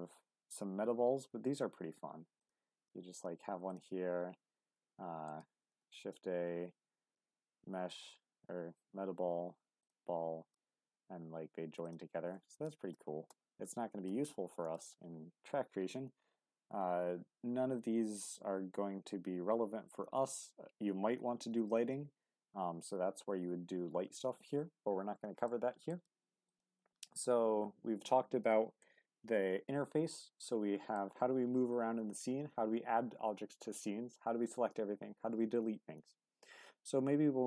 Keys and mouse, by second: 3.7 click, 4.3 shift+s, 5.8 shift+a, 11.8 click, 12.7 ctrl+z, 14.7 shift+a, 25.5-25.9 drag, 26.2 x, 28.8-30.9 middle drag.